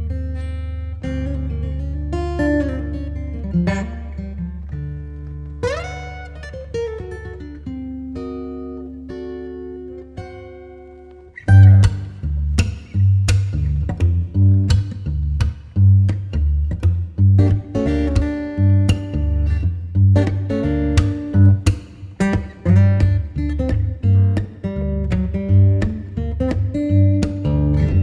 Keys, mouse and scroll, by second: 1.9 5, 2.2 Return, 9.2 click, 17.9 ., 18.2 Return, 19.7 ., 20.6 Return, 23.0-24.5 typing.